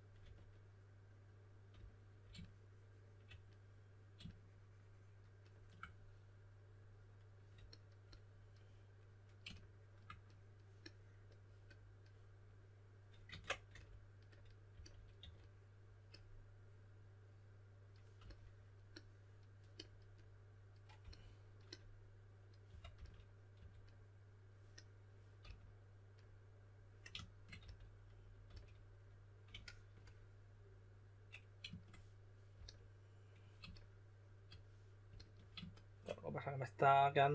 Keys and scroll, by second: 0.0-0.7 typing, 13.2 super+z, 14.4-15.6 typing, 21.0 s, 22.4-23.5 typing, 25.3 typing, 27.6-28.4 typing, 32.5 s.